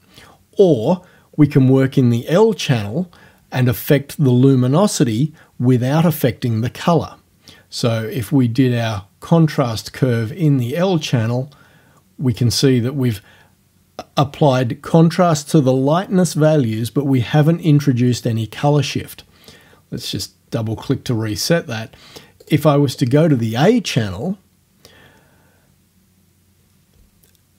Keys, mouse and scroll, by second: 0.8 click, 7.9-9.8 drag, 10.5-12.6 drag, 20.0 click, 22.5 click.